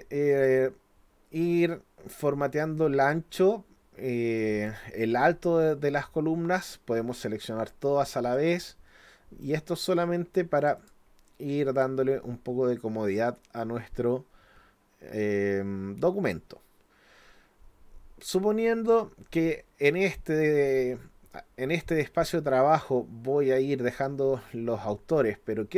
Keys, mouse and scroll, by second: 0.3 click, 2.6 click, 4.4 click, 6.6 click, 8.3 click, 10.6 click, 10.8 click.